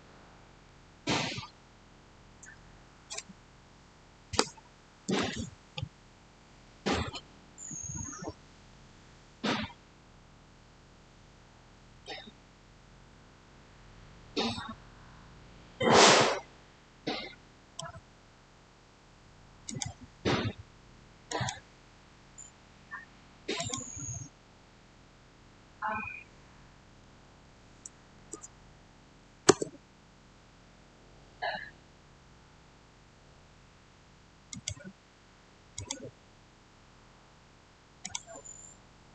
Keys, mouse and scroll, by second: 9.0 Return, 9.0 scroll down 1, 11.3 scroll up 1, 11.9-19.5 shift+middle drag, 19.5 click, 23.4 click, 26.8-27.1 typing, 28.0 Return, 34.4 click, 37.9 click.